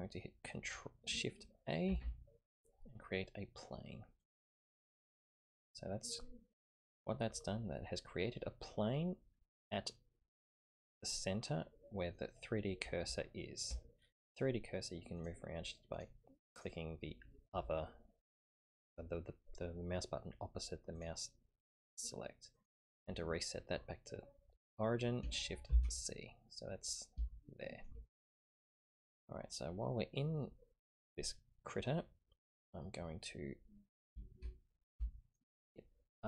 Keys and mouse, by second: 1.9 shift+a, 5.5-6.1 middle drag, 8.9 middle click, 13.3 shift+drag, 13.3 shift+middle drag, 13.5 shift+click, 13.5 shift+middle click, 15.2 click, 15.9 click, 16.5 click, 20.9 click, 22.5 click, 25.7 shift+c, 27.4 shift+click, 33.1 middle click, 35.1 shift+middle click.